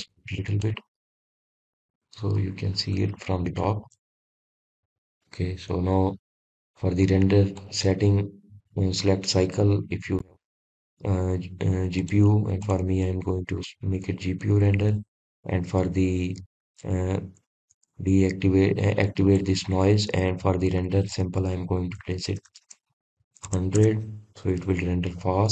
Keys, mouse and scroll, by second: 2.0-5.1 drag, 6.4-6.8 scroll down 1, 8.3-11.4 shift+middle drag, 12.0-15.2 middle drag, 19.4-20.6 scroll up 1, 20.6 scroll up 1, 20.8-22.2 shift+middle drag, 22.2-25.1 scroll down 1, 25.1 scroll down 1.